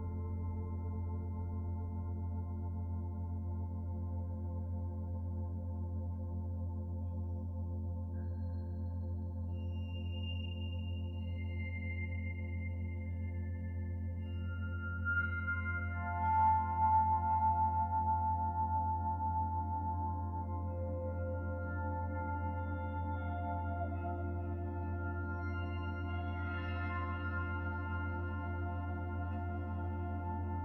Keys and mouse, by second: 6.9-9.1 middle drag, 20.2 ctrl+r, 22.5-27.1 middle drag, 27.7 Tab, 28.4 Tab.